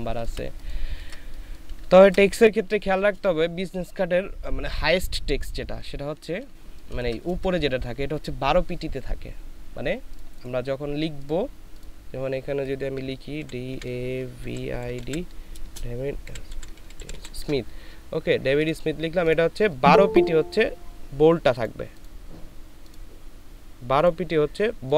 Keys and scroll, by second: 0.1 ctrl+space, 0.7 ctrl+space, 6.0 space, 7.3 ctrl+space, 13.4-17.1 typing.